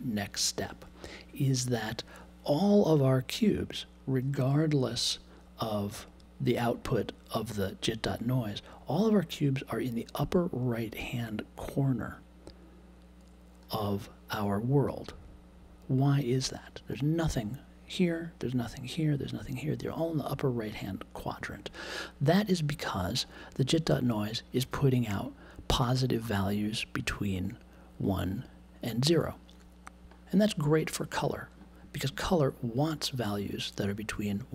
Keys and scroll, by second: 30.0 super+z.